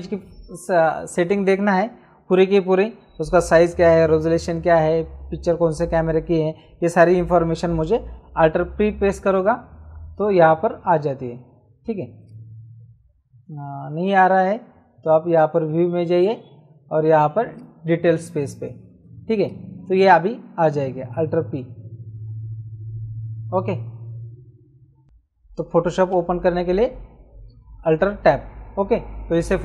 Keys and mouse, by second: 8.8 alt+p, 10.0 alt+p, 12.2 click, 15.3 click, 17.5 click, 19.4 click, 21.3 alt+p, 26.1 alt+Tab.